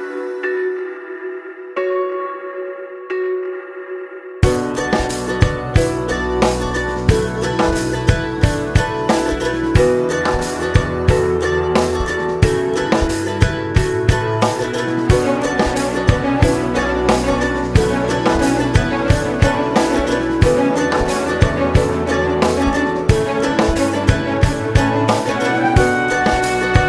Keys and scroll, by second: 1.5 ctrl+d, 26.6 ctrl+space.